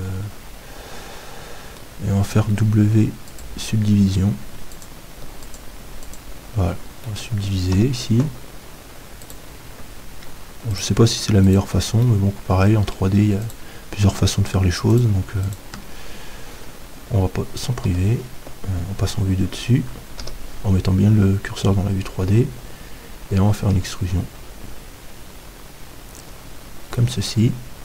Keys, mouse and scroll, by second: 2.5 w, 7.8 middle click, 7.8 KP_7, 9.2-17.3 right drag, 12.0-13.9 drag, 17.9 KP_7, 23.5 middle click.